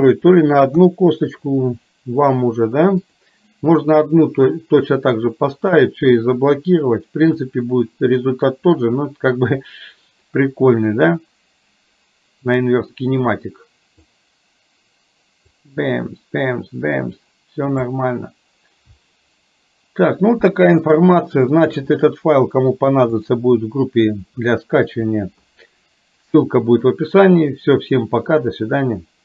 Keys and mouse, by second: 0.9 KP_3, 3.1 click, 7.4-14.1 drag, 15.5-17.9 drag, 20.9 shift+middle click, 23.2 click.